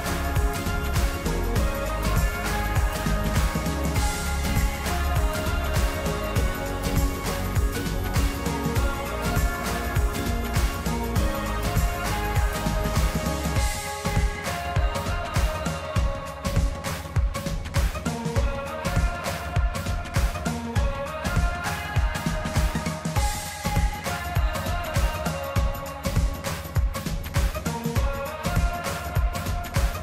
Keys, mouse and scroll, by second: 3.4-6.1 middle drag, 6.1 e, 9.0-11.3 middle drag, 11.3 click, 11.8-13.1 middle drag, 13.1 click, 14.0-15.4 middle drag, 15.4 click, 16.4 click, 18.7 KP_1, 19.6-21.2 middle drag, 21.2 click, 23.9-25.4 drag, 26.8-30.0 middle drag.